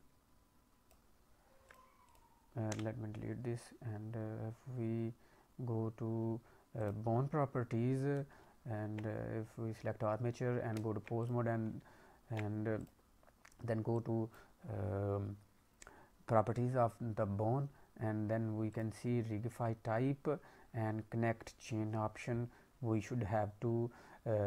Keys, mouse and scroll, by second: 1.6 click, 2.0 click, 2.6 Delete, 6.7 click, 8.4 ctrl+Tab, 8.9 ctrl+Tab, 10.7 Tab, 11.7 ctrl+Tab, 12.7 click, 13.9 click, 18.7 click, 19.1-20.3 scroll down 2, 20.3-21.5 scroll down 2, 21.5 click.